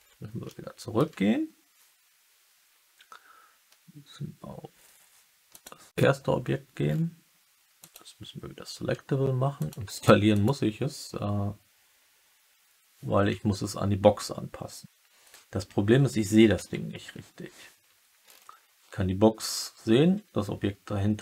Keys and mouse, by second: 0.4-0.9 alt+middle drag, 5.4 click, 7.7 click, 9.5 click, 9.9 click, 10.2 click, 16.9 KP_3.